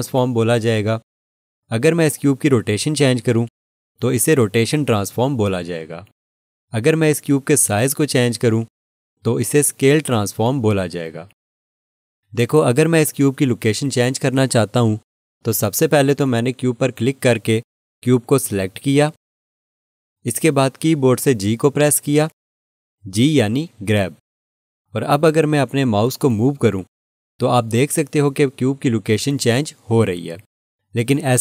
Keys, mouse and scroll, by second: 17.3 click, 21.3 g.